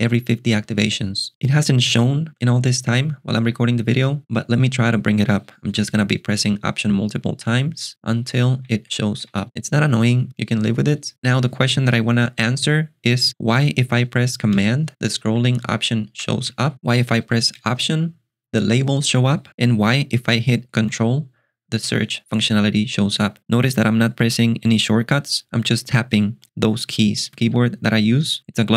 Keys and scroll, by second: 7.5 alt+super+BackSpace, 8.4 alt+super+BackSpace, 14.6 ctrl+alt+shift+super+6, 15.1-17.2 typing, 17.6 alt+super+BackSpace, 19.5 alt+super+BackSpace, 21.0 alt+super+space.